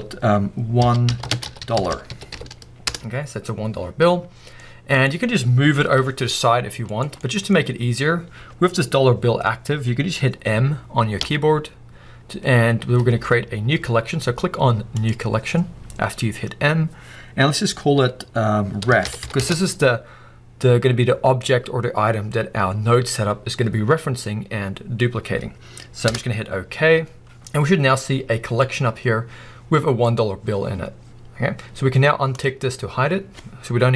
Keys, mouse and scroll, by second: 2.9-4.6 drag, 2.9 l, 3.5 Return, 4.6-6.8 middle drag, 5.1 scroll down 2, 5.9 g, 7.0 right click, 7.5 scroll up 1, 9.3-11.0 scroll up 1, 11.0-14.2 scroll up 1, 14.2-15.2 scroll up 1, 15.2-16.0 scroll up 1, 16.0-16.8 scroll up 1, 16.8-17.7 scroll up 1, 17.7-18.5 scroll up 1, 18.5-19.3 scroll up 1, 19.3-21.0 scroll up 1, 21.0-21.8 scroll up 1, 21.8-22.7 scroll up 1, 22.7-23.5 scroll up 1, 23.5-24.3 scroll up 1, 24.3-26.0 scroll up 1, 26.0 scroll up 1, 26.1-28.8 middle drag, 28.8 click, 32.4 click.